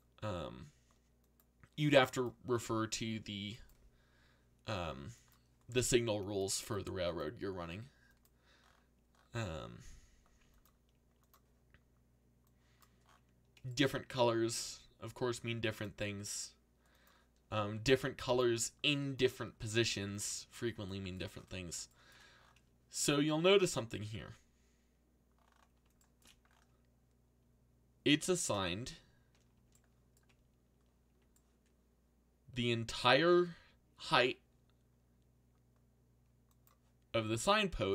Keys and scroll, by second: 14.0 a, 14.5 u, 17.4-20.3 typing.